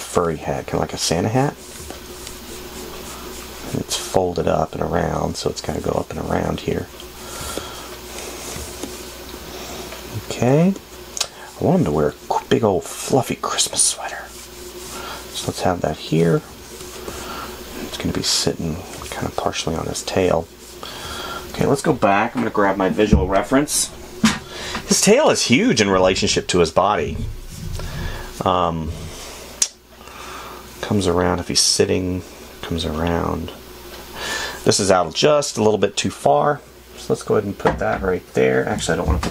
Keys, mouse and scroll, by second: 8.1 space, 19.4 space.